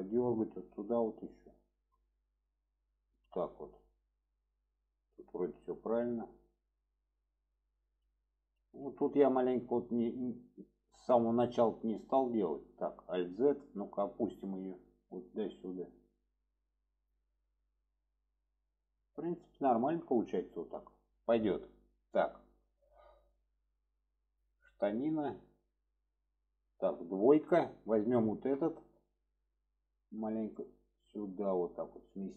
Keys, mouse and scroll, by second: 1.6-2.0 drag, 2.3 click, 3.8-5.2 shift+middle drag, 6.0-6.4 shift+middle drag, 7.8 shift+middle click, 8.6 alt+z, 9.8 middle click, 11.8 middle click, 12.9 alt+z, 13.7 click, 14.9-17.2 drag, 17.3 alt+z, 17.8-18.9 middle drag, 19.7 middle click, 21.9-22.6 middle drag, 23.1-25.5 middle drag, 26.0 middle click, 28.1 alt+shift+click, 28.6-29.3 middle drag, 30.4 click.